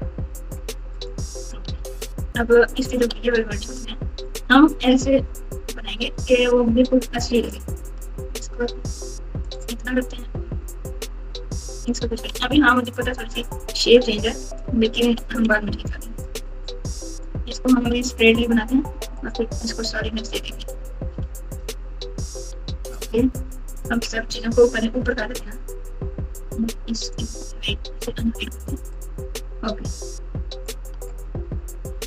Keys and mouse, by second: 0.9 click, 1.7 alt+z, 3.7 click, 3.9 click, 4.8 g, 7.0 click, 8.0 g, 11.7 click, 12.3 g, 14.4 click, 15.0 g, 16.6 click, 17.7 g, 19.8 Tab, 20.6 alt+z, 21.1 alt+z, 23.9 KP_2, 24.1 KP_2, 24.2 KP_2, 28.9 click, 30.5 click, 31.9 click.